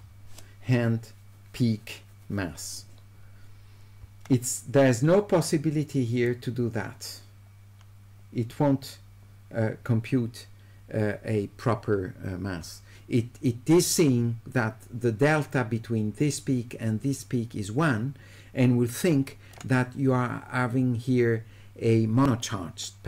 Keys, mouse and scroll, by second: 6.3-19.5 drag.